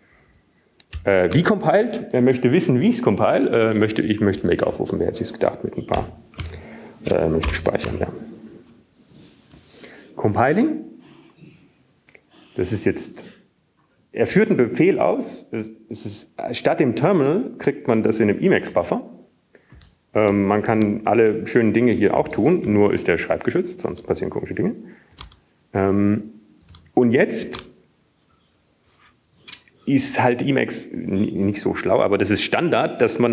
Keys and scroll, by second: 1.5-2.2 typing, 4.2 Left, 4.5-5.3 typing, 7.9-8.9 typing, 9.9 typing, 11.4 typing, 25.2 alt+w, 26.7 Up, 27.2 Up, 27.3 Up, 30.0 Down.